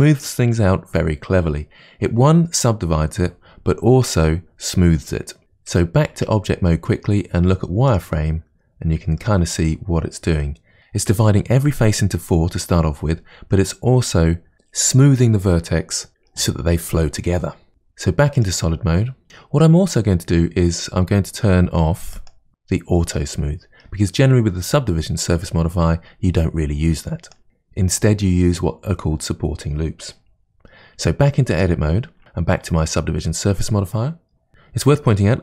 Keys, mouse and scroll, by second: 6.2 Tab, 7.9 click, 9.2-10.8 middle drag, 18.4 click, 20.2-21.9 scroll down 2, 22.2 click, 27.3 click, 31.6 Tab, 32.2 click.